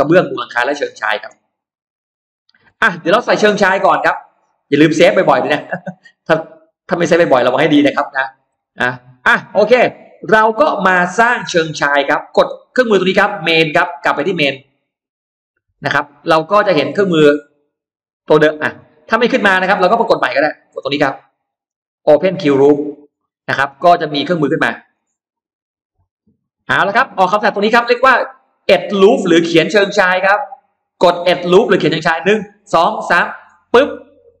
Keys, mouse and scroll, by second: 1.5 middle click, 2.5 scroll down 1, 3.1 middle click, 3.4 scroll down 1, 5.3 click, 6.4-7.6 drag, 8.4 middle click, 8.4-8.7 scroll up 1, 14.7 click, 17.2-18.8 drag, 19.4 click, 21.8 click, 24.8 click, 33.4 click.